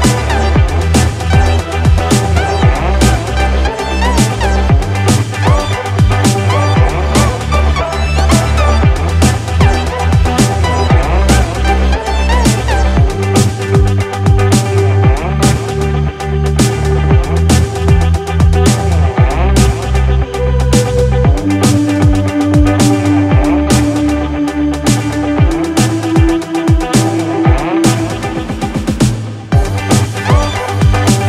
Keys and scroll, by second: 9.3 ctrl+=, 15.2 ctrl+=, 24.2 ctrl+z, 25.3 ctrl+alt+z.